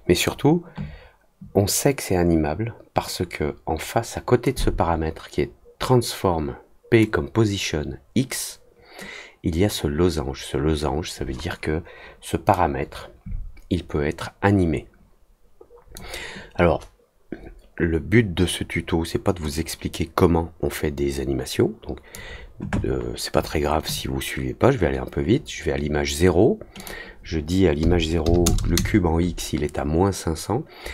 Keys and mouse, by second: 12.5-15.9 drag, 19.5-22.1 drag, 26.7 click.